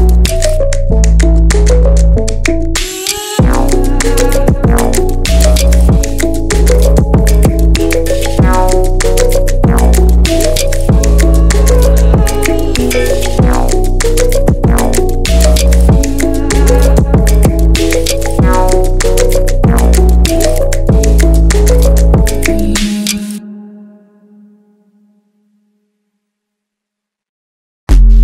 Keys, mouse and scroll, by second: 1.6-4.6 drag, 11.7-12.5 drag, 12.5 scroll up 1, 12.6-13.4 middle drag, 13.4 Tab, 13.7 scroll down 1, 13.8-15.8 middle drag, 15.8 scroll up 1, 16.0 Tab, 16.3-16.8 middle drag, 16.8-17.2 scroll up 1, 17.2-19.7 middle drag, 19.7 ctrl+r, 22.7 alt+shift+click, 24.3 alt+shift+click, 25.0-26.6 middle drag, 26.6 alt+shift+click.